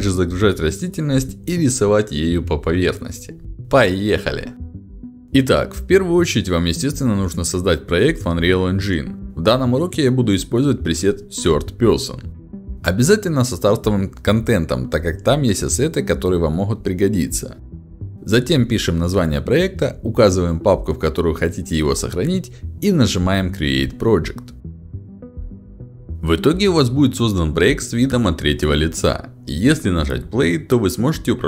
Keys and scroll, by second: 0.1 d, 0.4 w, 0.6 a, 2.3-4.2 typing.